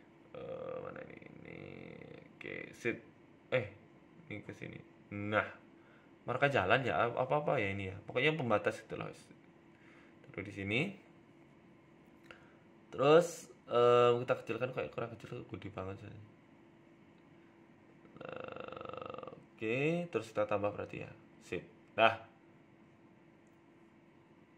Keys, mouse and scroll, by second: 0.1-0.8 scroll up 2, 0.8 scroll down 1, 1.8-2.7 scroll up 3, 2.7 click, 3.0 click, 3.5 z, 4.2 middle click, 4.8 Tab, 5.4 g, 7.6 KP_7, 8.2 z, 8.7 scroll up 2, 9.5 scroll up 1, 9.5 g, 13.1 scroll down 1, 14.7-15.3 scroll down 2, 14.7 s, 16.2-16.8 scroll up 3, 16.4 Tab, 16.8 Tab, 17.2 g, 18.9 Tab, 19.5 g, 21.7 click, 21.8 click, 22.1 click, 22.4-22.9 scroll down 2, 22.9-23.6 scroll down 3, 22.9 z, 23.6 middle click, 23.8 Tab, 24.0 middle click.